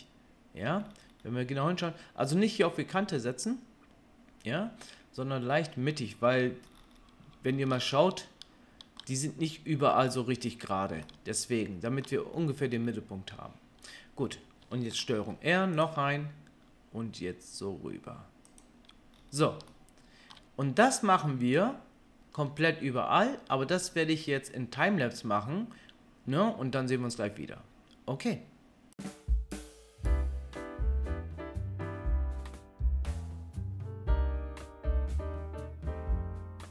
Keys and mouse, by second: 1.1-14.6 middle drag, 15.1 ctrl+r, 29.7 KP_3, 29.9-36.7 shift+middle drag, 30.8 ctrl+r, 31.9 ctrl+r, 33.8 ctrl+r, 34.9-36.2 ctrl+drag, 35.1 ctrl+r.